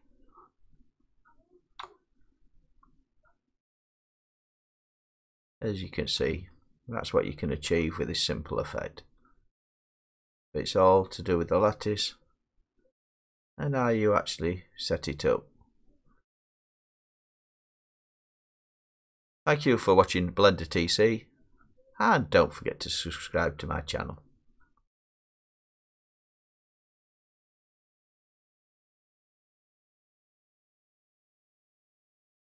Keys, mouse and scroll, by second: 0.6 middle click, 0.7 middle click, 0.8 middle click, 5.7 middle click, 7.7-9.2 middle drag, 9.8 middle click, 14.8 middle click, 15.8-20.3 middle drag, 20.5 middle click, 21.5 middle click, 21.7 middle click, 21.9 scroll.